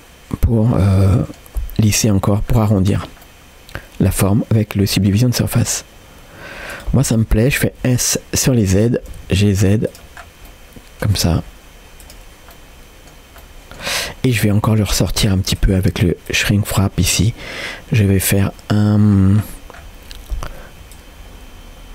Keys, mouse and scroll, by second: 1.2 middle click, 2.2-3.2 scroll up 3, 3.5-5.3 middle drag, 5.3 scroll down 1, 5.5 g, 7.5 s, 10.2 scroll down 1, 10.5 middle click, 11.3 s, 12.5 middle click, 13.5 middle click, 14.7 click, 15.6 click, 19.1-19.8 scroll down 3, 19.8-20.8 scroll up 1, 20.9-21.9 shift+drag.